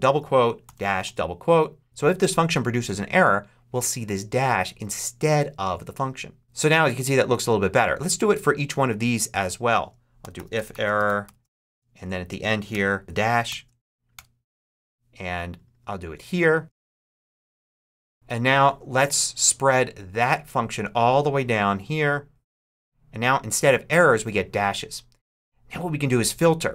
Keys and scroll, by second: 0.5 shift+-, 0.9 shift+', 9.8-13.3 typing, 11.8 super+Right, 14.0 shift+Return, 14.6 Return, 16.5-18.3 typing.